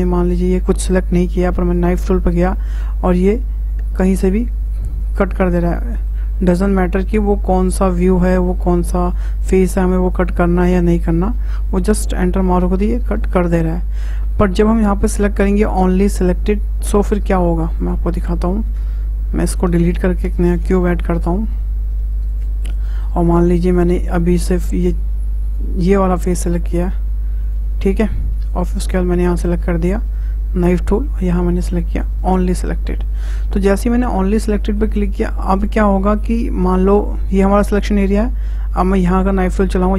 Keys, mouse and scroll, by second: 1.7-5.6 drag, 5.6-8.6 middle drag, 8.7-11.9 middle drag, 12.4 middle click, 13.3-13.8 scroll down 1, 13.8-14.9 scroll up 1, 14.9-16.8 scroll up 1, 17.8 click, 18.8 Tab, 20.7 shift+a, 22.9 middle drag, 23.1 Tab, 23.7-24.5 scroll up 2, 24.5 click, 25.4 shift+click, 26.6 shift+click, 27.4 shift+click, 28.1 shift+click, 30.6-32.3 drag, 33.1 scroll down 2, 33.6-35.0 middle drag, 35.0 scroll up 2, 35.5-38.5 middle drag, 38.8-39.9 drag.